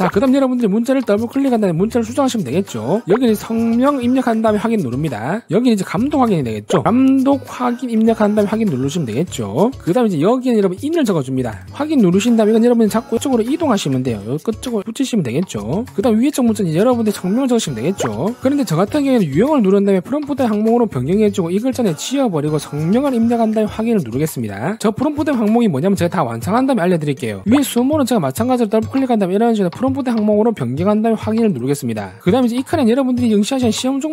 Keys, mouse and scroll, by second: 1.4 click, 1.7 click, 1.8 click, 2.7 click, 3.2-4.8 typing, 5.6 click, 5.9 click, 6.6-8.9 typing, 9.6 click, 10.4 click, 10.6 click, 12.8 click, 14.1-15.3 drag, 17.0 click, 17.2 click, 19.8 click, 21.3 click, 23.5 v, 24.6 click, 29.5 click, 30.8 click, 31.8 click.